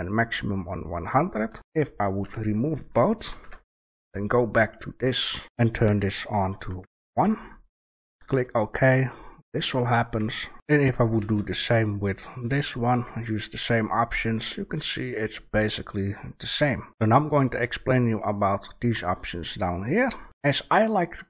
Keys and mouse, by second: 1.5 Delete, 1.9-2.6 drag, 2.1 Delete, 2.6-4.6 right drag, 3.2 shift+a, 9.0-10.0 drag, 10.0-13.9 right drag, 11.1 shift+a, 15.2-16.2 middle drag, 16.9 shift+a.